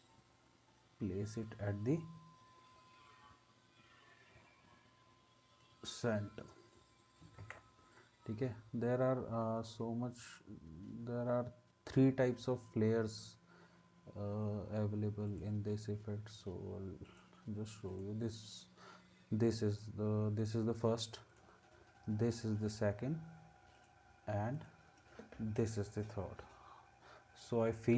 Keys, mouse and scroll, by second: 7.4 ctrl+s.